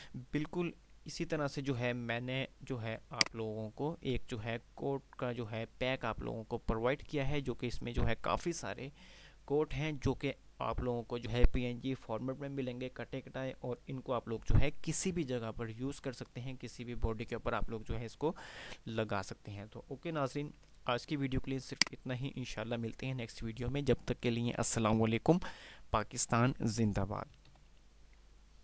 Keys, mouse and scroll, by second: 0.7 click, 23.1 click.